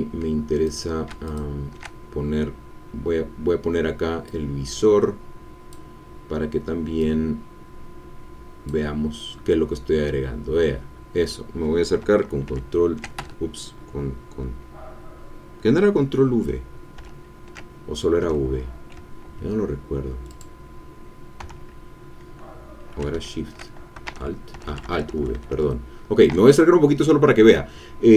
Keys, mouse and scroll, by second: 0.6 ctrl+click, 1.2 ctrl+shift+click, 2.6-3.0 scroll up 2, 3.1-3.7 scroll down 2, 4.2-5.9 drag, 7.0-8.8 drag, 10.3-10.8 scroll up 2, 10.8-12.0 scroll down 2, 12.4 ctrl+v, 13.1 ctrl+Escape, 16.9 ctrl+v, 20.3-21.3 drag, 21.3 v, 23.1 shift+v, 24.0 alt+v.